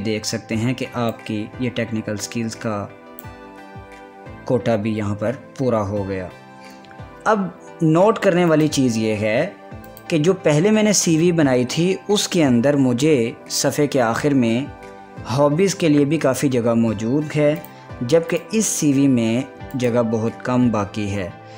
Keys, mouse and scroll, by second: 1.8 ctrl+v, 1.9-6.2 drag, 10.8 click, 18.2 click, 19.2 click.